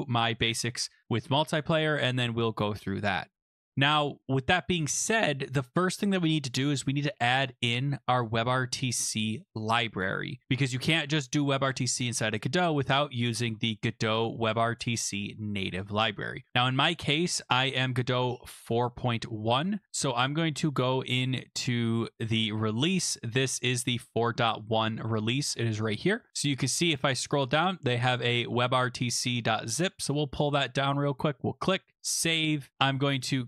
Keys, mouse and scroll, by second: 3.5-4.2 scroll, 4.9 click, 6.9 right click, 7.4 click, 11.7 click, 12.9 click, 20.0 click, 22.3 click, 23.2 scroll, 25.6 click, 25.8 click, 26.3 scroll, 26.5 scroll down 8, 26.6 scroll, 26.8 scroll down 5, 30.0 click, 32.0 click.